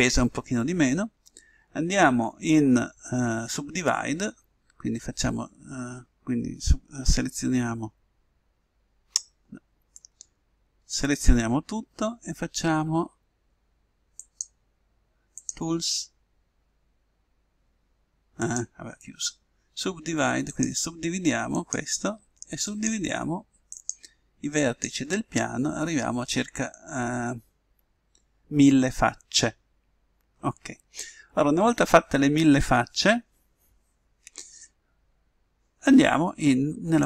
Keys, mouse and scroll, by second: 7.3 a, 10.1 a, 11.0 a, 14.3-17.3 drag, 18.6-20.3 drag, 20.6-26.4 drag.